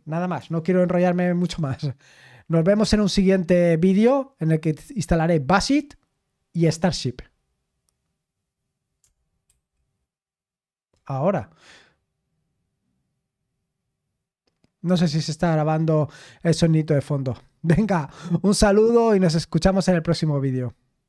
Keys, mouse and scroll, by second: 1.4 super+x, 9.4 super+x.